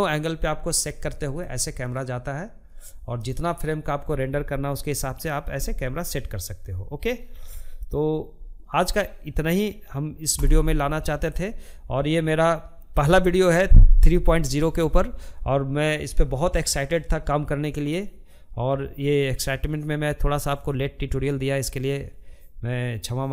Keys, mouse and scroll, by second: 8.1 n.